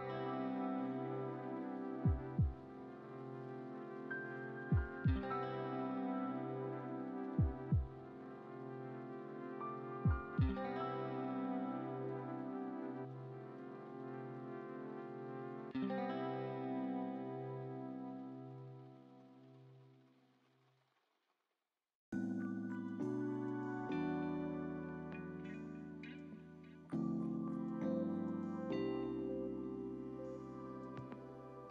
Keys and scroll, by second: 13.8 =.